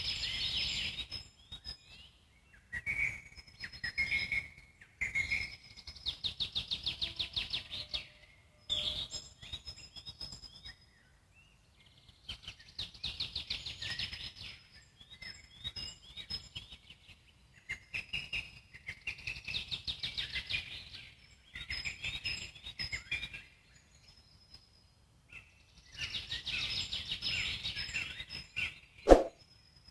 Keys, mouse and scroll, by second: 2.6 g, 5.5-5.9 alt+middle drag, 5.9-6.5 scroll up 1, 6.5 s, 16.0 click, 16.4 click, 17.3 scroll down 2, 17.6-19.6 alt+middle drag, 19.9-20.3 scroll up 1, 20.3 click, 21.1-27.5 alt+middle drag, 27.5 /, 29.5-29.9 middle drag.